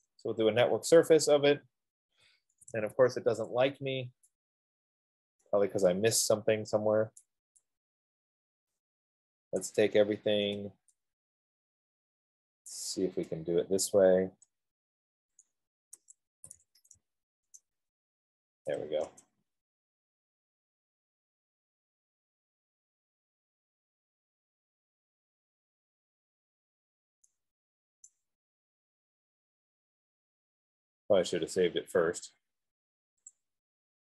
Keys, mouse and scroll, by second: 0.1 Return, 1.1 click, 1.1 typing, 3.0 Escape, 3.1 Escape, 3.3 Escape, 5.7 right click, 7.6 right click, 9.8 click, 13.0 shift+click, 14.2 scroll, 15.7 shift+click, 16.6 middle click, 17.0 typing, 19.2 Return, 20.3-21.0 typing, 23.9 Return, 25.7 F15, 28.3 right click, 30.1-33.7 right drag.